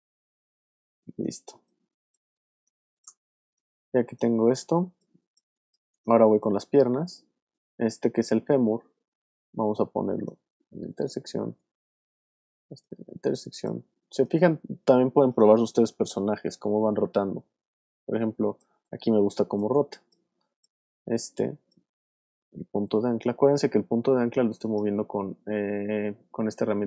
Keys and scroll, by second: 1.2 space, 3.8 space, 13.1 space, 14.6 w, 18.7 super+z, 19.2 super+space, 19.8 space, 22.1 super+z, 22.9 super+w.